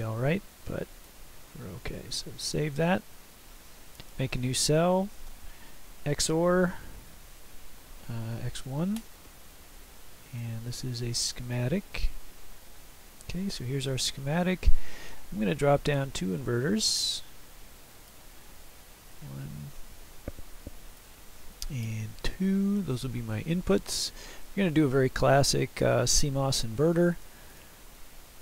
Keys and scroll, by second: 2.0 ctrl+s, 6.2-8.6 typing.